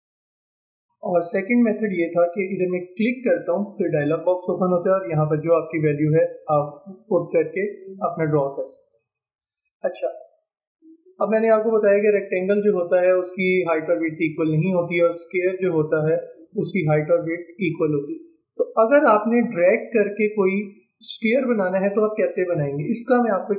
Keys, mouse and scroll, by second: 6.6 click, 7.3 click, 9.6 ctrl+z, 12.9-16.6 drag, 18.7 ctrl+z, 19.6 ctrl+z.